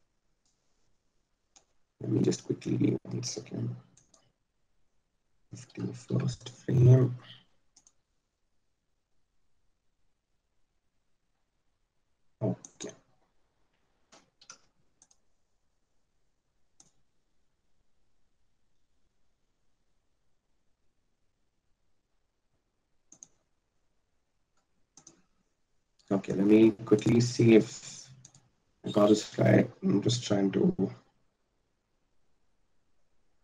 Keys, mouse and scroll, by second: 1.2-3.3 drag, 9.4 r, 15.7 i, 26.2 i.